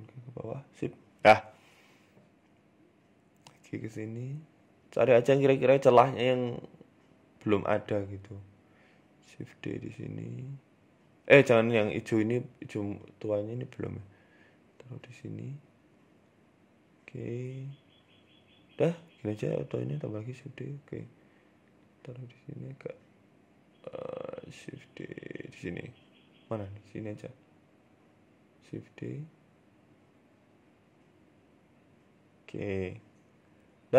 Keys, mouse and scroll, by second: 0.9 scroll down 3, 1.2 shift+middle click, 1.8 right click, 2.3 right click, 2.9 shift+d, 6.0 r, 6.0 shift+d, 6.9 right click, 7.1 shift+d, 8.1 shift+d, 8.9 s, 9.8 ctrl+z, 10.1 ctrl+z, 10.9 ctrl+z, 11.4 right click, 11.9 shift+d, 12.7 s, 13.7 shift+d, 17.5-18.1 scroll down 3, 17.5 s, 17.8 shift+middle click, 18.1 scroll up 1, 19.0-19.5 scroll up 2, 19.0 shift+d, 19.9 s, 21.2 s, 22.5 right click, 23.1 right click, 23.5 shift+d, 27.7 right click, 28.0 shift+d.